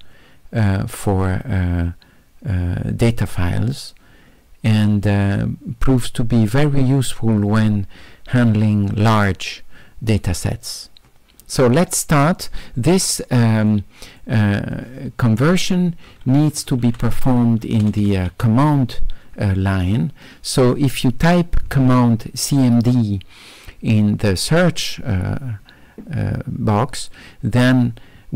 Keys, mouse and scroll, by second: 13.6 click, 14.1 click, 17.2 d, 18.2 d.